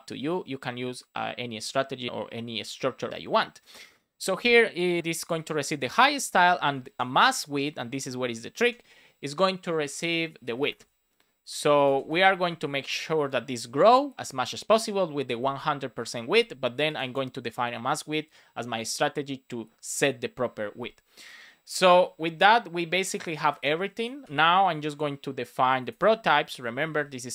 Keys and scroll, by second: 5.2 Return, 5.7 space, 7.0 shift+w, 7.9 Return, 8.3 shift+;, 8.5 space, 9.6 space, 11.3 Right, 11.7 Left, 12.0 space, 12.3 super+s, 23.4 super+c, 24.2 super+v, 26.5-27.3 typing.